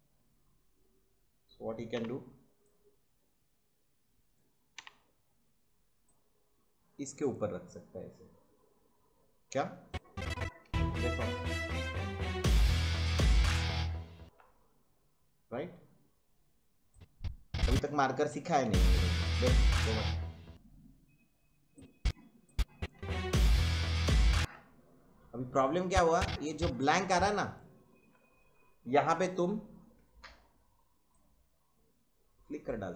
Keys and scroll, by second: 1.9 i, 4.7 o, 10.6 space, 14.2 space, 18.6 space, 20.5 space, 22.9 space, 24.3 space.